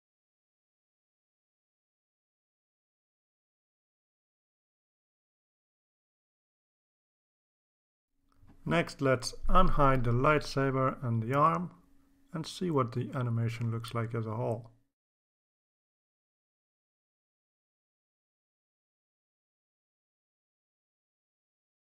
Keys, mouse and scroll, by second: 10.2 click, 10.6 click, 11.4 click, 12.1 click, 12.5 ctrl+s, 14.2 click, 14.5 click.